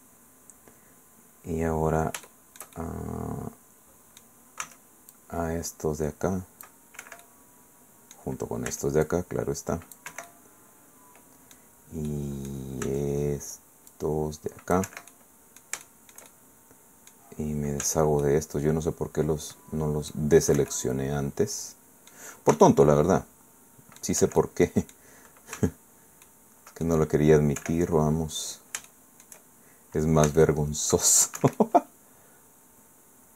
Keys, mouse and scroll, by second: 2.3 shift+click, 2.4-4.4 shift+middle drag, 4.6 c, 5.1-6.8 drag, 7.0 Escape, 7.2-8.3 middle drag, 8.7 c, 9.0-10.1 drag, 10.1 Escape, 10.3-11.7 middle drag, 12.1 middle click, 12.8 c, 13.9-14.9 drag, 14.9 Escape, 15.1-17.3 drag, 17.8 c, 18.2-20.3 drag, 20.6 Escape, 20.7-22.3 drag, 22.5 c, 22.8-24.2 drag, 24.2 Escape, 24.4 click, 25.5 c, 26.2 click, 27.0 middle click, 27.6 Escape, 27.9-28.8 scroll up 1, 28.9 shift+middle click, 29.3 shift+scroll up 1, 30.3 c, 30.4 click, 31.4 Escape, 31.6-33.3 drag.